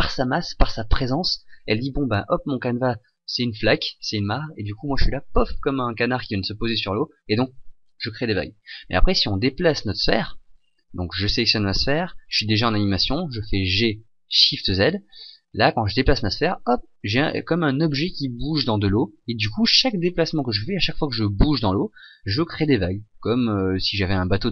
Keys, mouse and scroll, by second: 9.9 right click, 13.5 g.